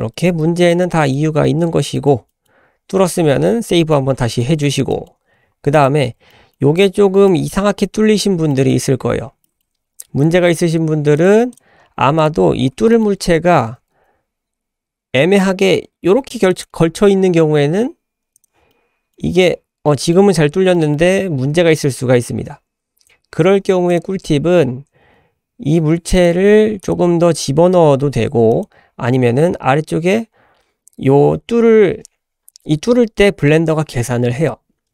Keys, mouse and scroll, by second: 0.1 middle click, 0.3-0.6 scroll up 1, 0.7 shift+middle click, 1.0 shift+middle click, 1.4 shift+middle click, 1.9 shift+middle click, 2.3 middle click, 3.0 ctrl+s, 3.5-3.8 scroll down 2, 3.8 shift+middle drag, 4.1 scroll up 2, 4.4 middle drag, 4.9 shift+middle click, 5.7 click, 6.0 scroll up 2, 6.3 shift+middle drag, 6.7 click, 7.0 scroll up 1, 7.2 shift+middle drag, 7.5-8.4 shift+scroll up 4, 8.5 shift+middle drag, 8.8 shift+scroll up 1, 9.0-9.4 scroll down 2, 9.4 middle drag, 9.7 scroll down 1, 9.8 `, 11.2 click, 11.2-11.5 scroll down 1, 11.8-12.2 scroll up 1, 12.2 click, 12.4-14.5 scroll up 6, 12.9 shift+middle drag, 13.7 g, 18.3 click, 18.7-19.1 middle drag, 19.5 scroll up 1, 19.8 middle drag, 20.7-21.4 middle drag, 23.9 click, 26.1 click, 28.5 click.